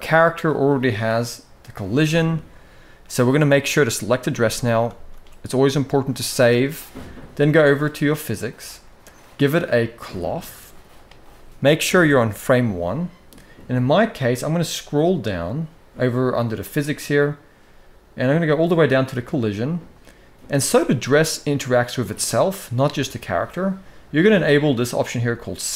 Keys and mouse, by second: 1.9-2.2 middle drag, 3.2 click, 4.6 ctrl+s, 5.9-6.4 middle drag, 9.9 click, 25.6 click.